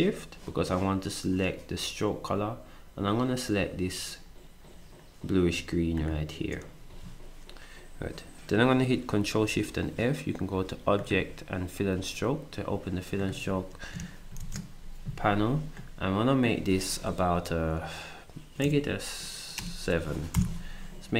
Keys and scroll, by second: 6.9 s, 14.4 ctrl+shift+f, 18.6 6, 19.6 BackSpace, 20.0 7, 20.3 Return.